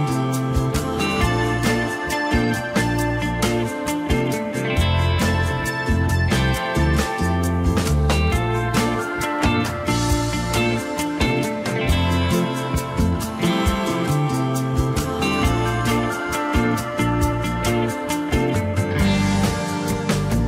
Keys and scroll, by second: 11.2 shift+a, 15.7 n, 18.8 n.